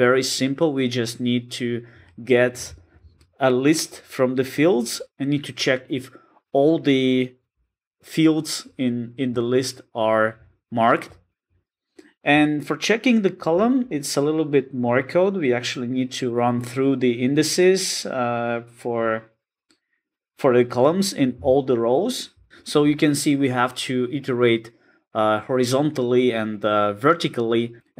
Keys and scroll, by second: 13.5 super+b.